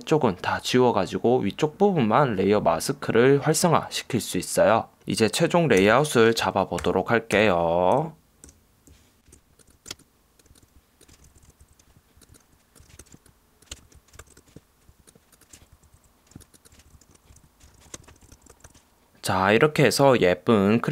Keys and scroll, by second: 5.9 v, 6.9 super+0, 7.4 super+-, 8.5 super+=, 9.9 ↺, 11.2 shift+Up, 11.3 shift+Left, 11.4 shift+Down, 11.5 shift+Left, 11.6 shift+Down, 11.7 shift+Up, 13.0 super+=, 13.7 Return, 14.0 Down, 14.3 super+-, 16.0 shift+Up, 16.9 shift+Up, 16.9 shift+Down, 17.1 Right, 17.4 Up, 17.5 Down, 17.9 Left, 18.0 Return, 18.3 alt+super+0, 18.4 super+=, 18.7 alt+super+0.